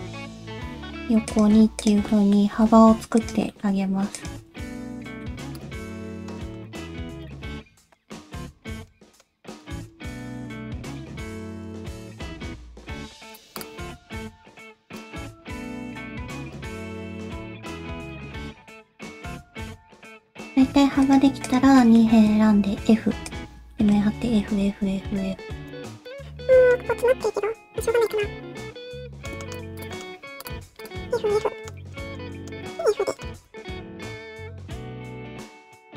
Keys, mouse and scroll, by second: 0.6 g, 1.8 click, 2.1 middle click, 2.5 g, 3.5 middle click, 4.1 click, 4.6 shift+middle click, 4.9 middle click, 5.5 ctrl+click, 6.0 /, 6.1 middle click, 6.3-6.9 scroll up 4, 6.5 shift+middle click, 6.9 g, 7.4 shift+middle click, 7.5 g, 7.8 click, 7.9 middle click, 8.4 middle click, 9.1 middle click, 9.3 g, 9.7 middle click, 10.2 click, 10.3 middle click, 10.5 g, 11.1 middle click, 11.4 middle click, 11.9 click, 12.1 shift+middle click, 12.3 scroll up 2, 12.5 middle click, 13.0 g, 13.6 click, 13.7 g, 14.2 middle click, 14.7 g, 15.1 click, 15.3 middle click, 16.0 g, 16.7 middle click, 17.4 middle click, 17.8 g, 18.2 middle click, 19.2 scroll down 2, 19.5 shift+middle click, 19.6 middle click, 20.0 shift+middle click, 20.3 shift+middle click, 20.7 2, 21.0 click, 21.4 shift+click, 21.8 shift+middle click, 22.5 f, 23.3 click, 23.7 shift+middle click, 24.2-26.9 typing, 25.4 shift+middle click, 25.6 shift+middle click, 25.7 scroll up 2, 26.0 click, 26.2 middle click, 28.2 middle click, 29.4 shift+middle click, 29.8 click, 29.9 middle click, 30.1 g, 30.6 2, 30.8 click, 31.1 f, 31.3 f, 31.4 middle click, 31.9 middle click, 32.3 middle click, 32.6 f, 32.7 middle click, 33.3 2, 33.4 click, 33.5 scroll up 1, 33.5 1, 33.8 middle click, 34.6 shift+click, 35.0 middle click, 35.5 g.